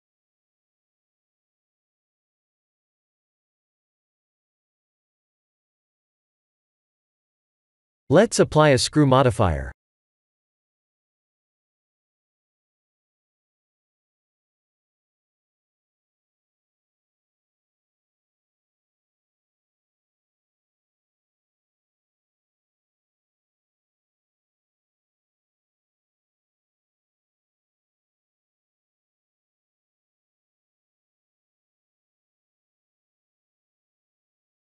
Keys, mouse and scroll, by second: 0.3 shift+middle click, 4.9 shift+middle click, 5.6 Tab, 7.7 click, 8.3 click, 10.5 shift+middle click, 11.4 middle click, 14.9 click, 16.7 middle click, 22.0 click, 22.8 Tab, 23.7 right click, 27.2 right click, 28.4 middle click, 28.9 Tab, 29.6-30.1 scroll down 2, 30.1 middle click, 31.8 3, 32.7 click, 33.8-34.6 ctrl+KP_Add.